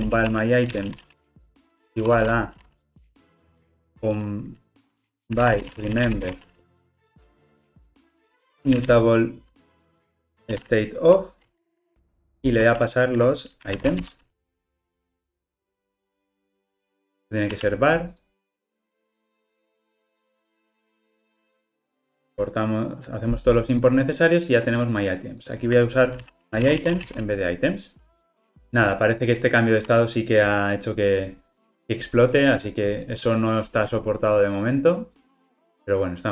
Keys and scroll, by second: 12.4 Return, 15.2 alt+Return, 22.2 alt+Return, 32.9 ctrl+r.